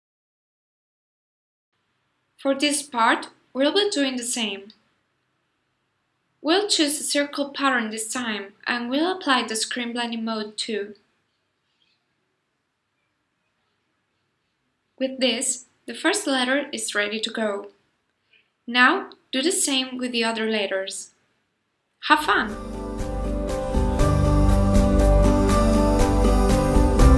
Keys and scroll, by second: 6.5 super+c, 6.8 super+f, 17.0 super+g, 23.0 super+c, 23.1 super+f, 24.6 super+c, 24.8 super+f.